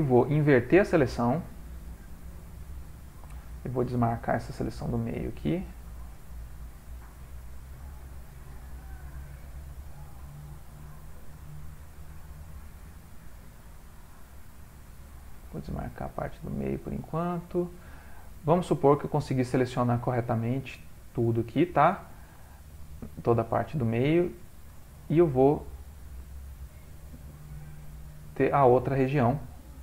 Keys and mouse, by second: 2.6 ctrl+i, 4.5 alt+shift+click, 6.8 alt+shift+click, 7.3 middle click, 9.9 middle click, 12.2 middle click, 12.5 alt+shift+click, 13.2 middle click, 14.8 alt+shift+click, 15.7 shift+middle click, 16.9 middle click, 18.8 alt+shift+click, 20.5 alt+shift+click, 21.0 middle click, 21.5 middle click, 22.4 middle click, 22.4 ctrl+middle click, 22.6 ctrl+middle click, 22.9 middle click, 23.7 ctrl+middle click, 24.2 middle click, 24.9 ctrl+middle click, 26.3 middle click, 27.6 alt+shift+click.